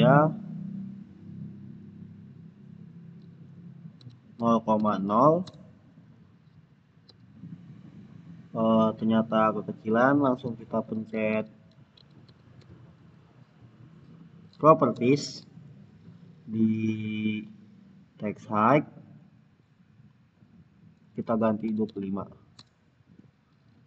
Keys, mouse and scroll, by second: 3.7-5.1 typing, 5.3 Return, 9.4 Return, 10.6-13.0 typing, 14.8 Return, 16.3-18.8 scroll down 1, 20.2 click, 21.3-22.2 typing, 22.4 Return, 23.6 click.